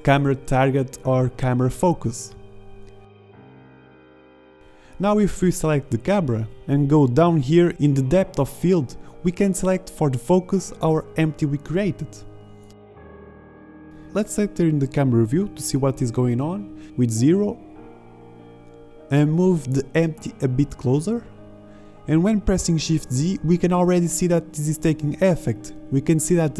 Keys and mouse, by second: 0.7-2.3 middle drag, 2.3 BackSpace, 4.9 click, 5.4-14.7 drag, 15.7 KP_0, 16.4 shift+z, 18.7 z, 21.6 shift+z, 23.9 z, 26.2 ctrl+z.